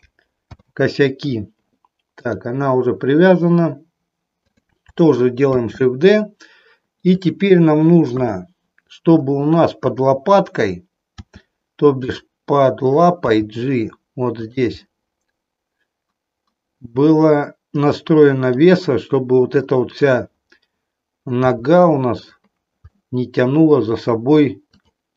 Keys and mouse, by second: 0.3 ctrl+p, 2.1 click, 4.5 click, 5.5 shift+d, 7.2 click, 8.1 KP_1, 11.2 r, 13.3 g, 14.5 click, 14.8-18.6 middle drag, 20.0 click, 21.3 g, 23.0-24.1 middle drag, 24.6 click.